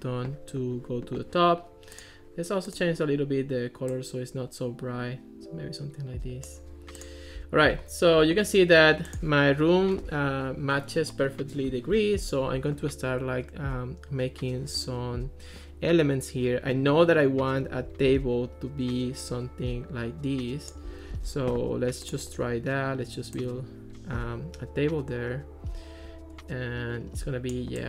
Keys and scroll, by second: 18.1 ctrl+s, 21.1 ctrl+x.